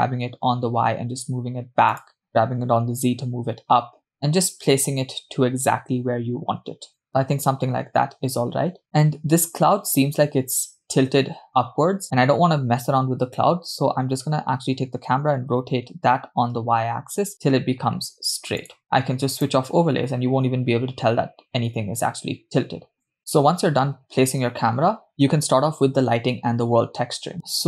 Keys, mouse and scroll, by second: 2.4 g, 15.3 r, 19.5 click.